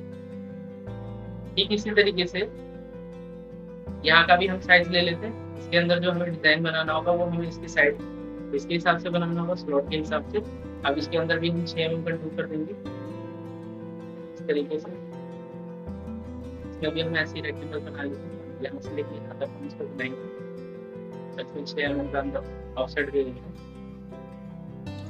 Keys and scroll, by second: 13.5 ctrl+k, 22.8 ctrl+z.